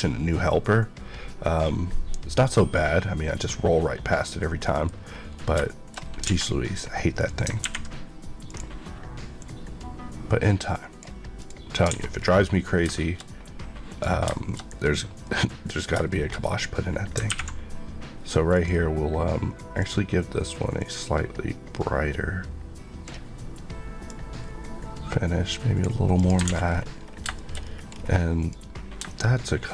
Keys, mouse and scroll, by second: 4.6 middle click, 4.9 scroll up 1, 5.5-6.0 shift+scroll up 2, 5.6 shift+middle click, 6.2 alt+a, 7.1 click, 8.4 click, 9.3 click, 11.9 alt+a, 12.1 scroll down 1, 12.9 shift+middle click, 13.9 click, 14.3 shift+middle click, 15.2 middle click, 15.6-16.7 scroll up 4, 16.1 shift+middle click, 17.1 ctrl+scroll up 1, 18.5 click, 19.7 click, 26.5 alt+a, 26.6 scroll down 1, 27.2 shift+scroll down 1, 27.3 shift+middle click, 27.6 scroll up 1, 28.4 click, 28.9 shift+click.